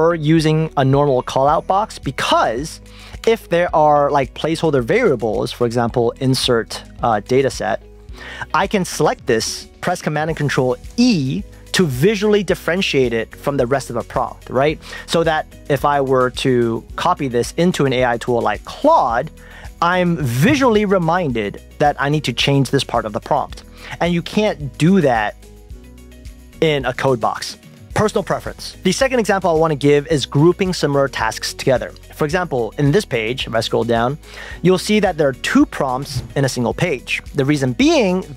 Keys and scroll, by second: 3.3 Return, 8.9 shift+super+Left, 11.0 super+e, 16.5 super+c, 17.2 super+Tab, 18.8 super+v, 23.5 super+Tab, 25.2 shift+super+Left, 25.5 super+e, 26.5 super+e.